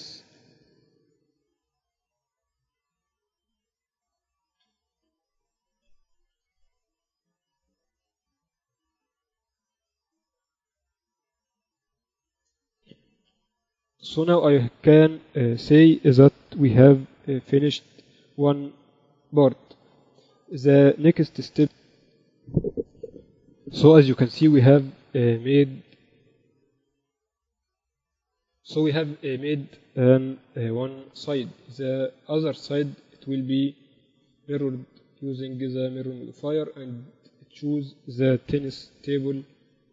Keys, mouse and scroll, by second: 0.4 f, 1.1 ctrl+KP_7, 2.3 z, 2.5 f, 4.2-6.4 right drag, 5.4 g, 6.7 f, 7.4 KP_7, 7.8 z, 9.1 KP_1, 9.9 z, 10.4 Tab, 11.9 Tab, 12.5-14.1 typing, 16.6 a, 16.8 a, 17.5 g, 19.5 z, 20.0 Tab, 25.2 ctrl+Up, 29.0-30.6 drag, 30.6 KP_8, 30.8 KP_6, 31.4 KP_6, 31.4 z, 33.1 z, 34.0-35.7 drag, 36.7-38.5 drag.